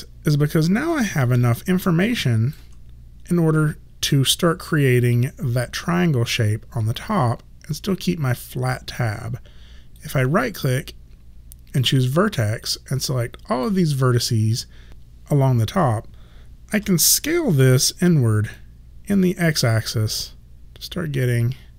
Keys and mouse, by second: 1.0 alt+middle click, 1.7 alt+right click, 10.0 right click, 12.7 click, 16.8 r, 18.6 click.